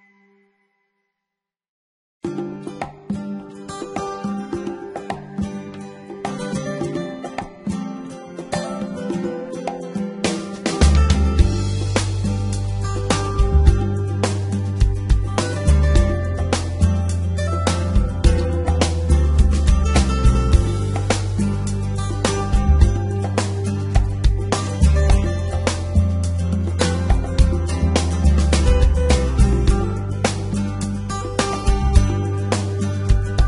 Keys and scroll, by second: 0.7 Escape, 2.6 g, 2.7 x, 7.7 g, 8.3 z, 9.6 g, 9.7 x, 12.2 g, 12.3 x, 21.2 g, 21.8 x, 23.8 g, 23.9 z, 24.5 g, 24.7 y, 26.8 g, 26.9 x, 29.8 g, 30.0 x, 32.0 g, 32.4 y.